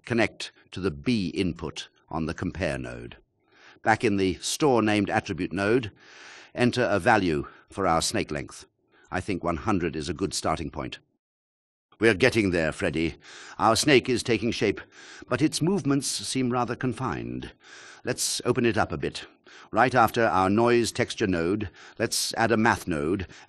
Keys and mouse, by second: 0.4 shift+click, 1.7-3.6 drag, 2.4 KP_0, 5.8 click, 14.4 drag, 18.5 alt+shift+click.